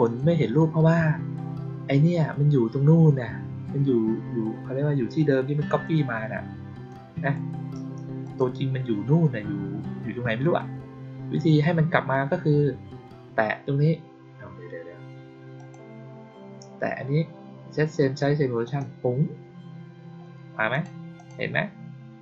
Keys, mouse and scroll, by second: 5.6 click, 6.8-7.2 drag, 8.1 click, 15.5 click, 18.5 click, 20.6 click, 21.1 click.